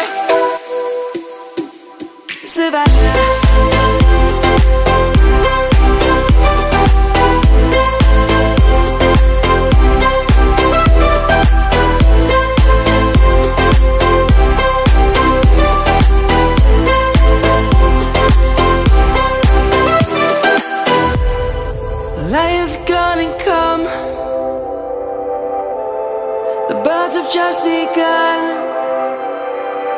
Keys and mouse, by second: 0.1 1, 1.7 click, 2.8 ctrl+z, 3.7 click, 5.2 shift+click, 5.3 click, 6.5 middle click, 7.4 click, 8.4 click, 9.7 shift+click, 10.5 shift+click, 11.3 shift+click, 16.4 click, 17.7 shift+click, 19.2 ctrl+-, 20.4 middle click, 24.9 ctrl+z, 25.5 middle click, 27.7 ctrl+z, 29.3 click.